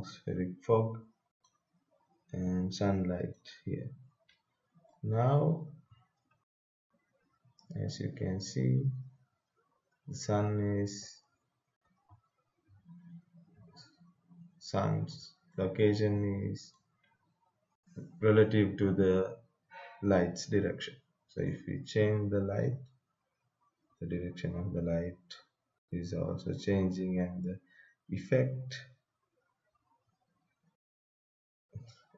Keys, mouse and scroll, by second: 1.4-3.3 drag, 4.9-6.2 right drag, 6.2 w, 6.5 w, 7.0 w, 7.5 s, 10.4-13.6 typing, 16.2-19.1 right drag, 21.4-32.1 drag.